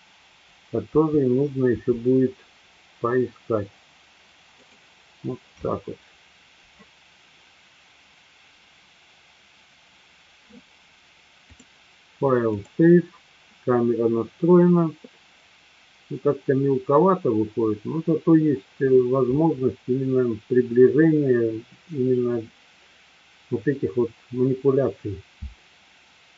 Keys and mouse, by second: 1.0 Down, 1.7 Down, 4.7 click, 11.5-13.3 drag.